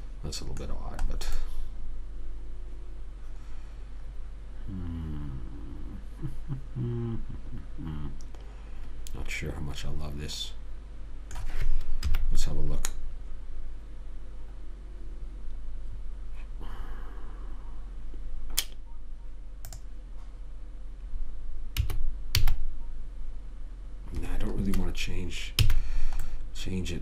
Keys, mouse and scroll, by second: 1.0 middle click, 12.4 KP_3, 13.5-15.7 middle drag, 20.1 click, 22.1 s, 26.0 a, 26.4 middle click.